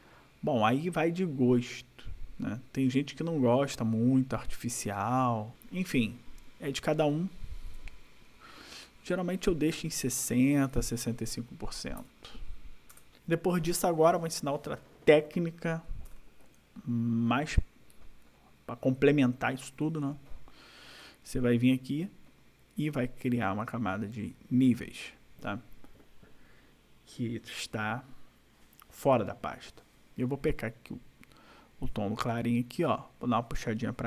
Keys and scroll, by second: 8.2 ctrl+=, 11.9 5, 12.9 BackSpace, 16.1 ctrl+=.